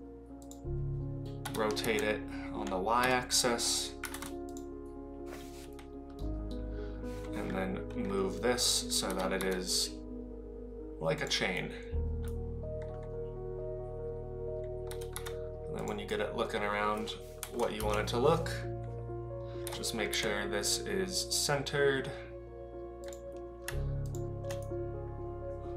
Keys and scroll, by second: 1.4 r, 9.1 g, 14.9 g, 17.4 KP_7, 17.7 KP_Decimal, 19.7 g.